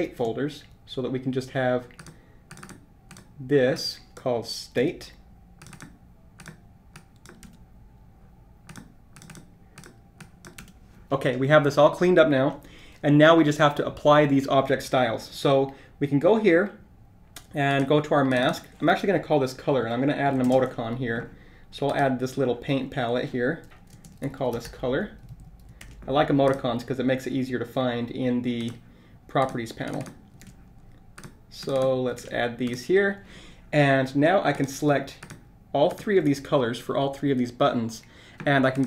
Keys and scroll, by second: 0.0 shift+super+g, 20.5 ctrl+shift+super+space, 25.2 super+r, 25.3 super+a, 30.4 super+v, 32.6 super+v.